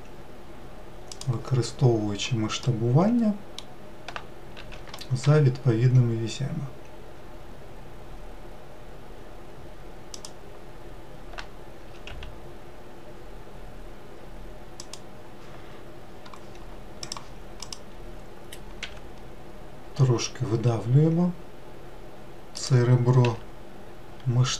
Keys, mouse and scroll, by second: 1.8-2.9 scroll down 4, 2.9-4.8 middle drag, 4.8 s, 12.0 s, 17.3 click, 19.1 e, 23.5 s.